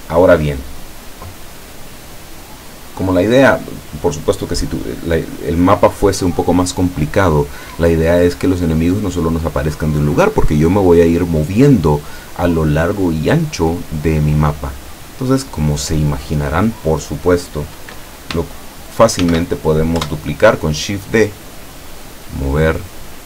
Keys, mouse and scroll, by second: 19.3 shift+d, 20.1 Return, 21.8-23.0 drag.